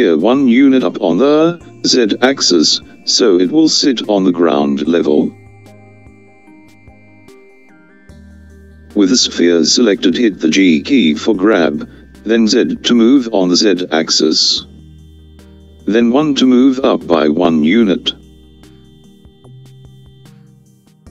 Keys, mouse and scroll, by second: 11.6 g.